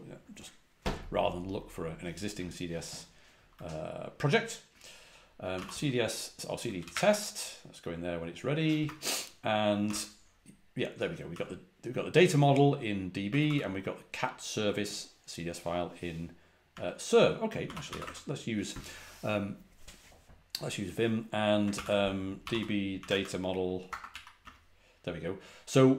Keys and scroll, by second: 5.4-7.2 typing, 8.7 Return, 9.8 r, 10.3 Return, 11.2 Return, 11.2 j, 13.4 typing, 16.6-18.3 typing, 21.6 ctrl+p, 22.1-24.5 typing.